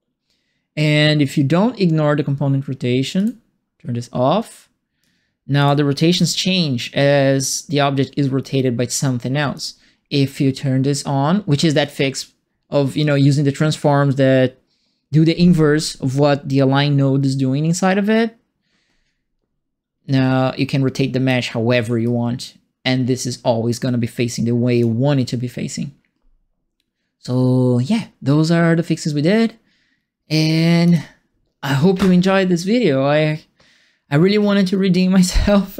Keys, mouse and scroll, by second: 3.1 click, 5.0 alt+click, 6.0 e, 6.9-9.5 drag, 11.8 click, 20.0-21.2 drag, 22.0-24.8 drag, 30.3 alt+click.